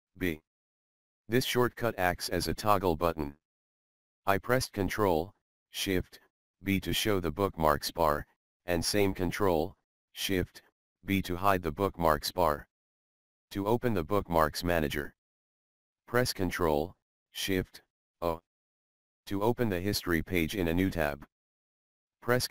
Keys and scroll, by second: 0.9 ctrl+shift+e, 6.1 ctrl+shift+e, 11.1 ctrl+shift+e, 17.3 ctrl+shift+c.